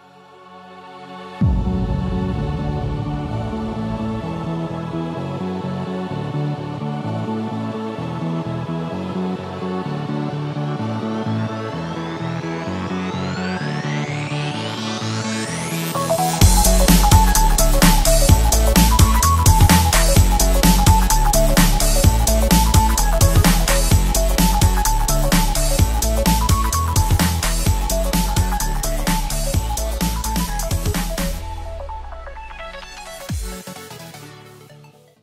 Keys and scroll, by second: 1.8 shift+super+], 5.7 shift+super+space, 7.1 alt+super+space, 7.2 alt+super+space, 7.3 alt+super+space, 7.3-7.8 typing, 9.0 alt+super+space, 9.5 super+space, 10.8 Left, 11.0 Left, 11.1 Left, 11.2 Left, 11.4 Left, 11.6 Left, 12.9 space, 13.4 super+space, 13.5 super+space, 13.5 super+space, 13.6 super+space, 14.0 super+space, 14.0 typing, 15.0-16.7 typing, 16.8 super+space, 16.9 super+space, 17.0 super+space, 17.3 super+space, 17.4 super+space, 17.4-18.9 super+space, 20.8 space, 22.1 super+y, 24.7 super+y, 25.3 space, 25.8 alt+super+space, 25.9 alt+super+space, 26.0 alt+super+space, 26.0 alt+super+space, 26.1 alt+super+space, 26.2 alt+super+space, 26.3 alt+super+space, 26.4 alt+super+space, 26.6-27.4 typing, 27.5 alt+super+space, 31.0-32.5 typing.